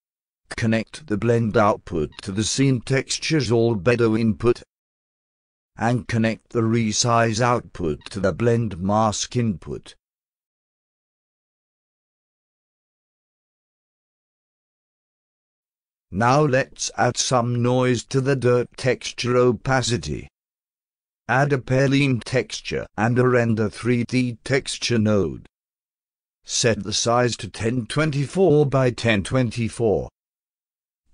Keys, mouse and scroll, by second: 0.7-2.4 drag, 4.5-5.1 alt+drag, 5.3-5.8 alt+middle drag, 6.9-8.5 drag, 9.9-11.8 alt+drag, 12.1 alt+click, 12.6-14.1 alt+drag, 14.2-14.7 alt+drag, 14.9 alt+middle drag, 15.6 click, 16.0 click, 20.5 click, 21.2-22.2 drag, 23.9 click, 25.3 click, 26.8 click, 27.7 click, 28.3-30.4 typing.